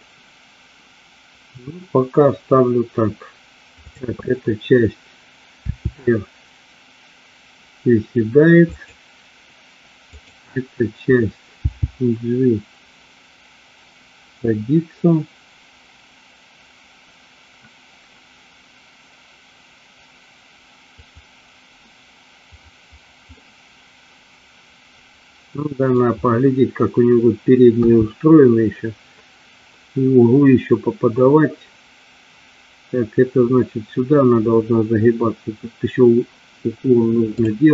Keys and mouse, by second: 5.7 r, 8.8 click, 10.2 click, 11.8 g, 21.0 click, 23.4-26.0 middle drag, 27.8 KP_3, 37.4 click.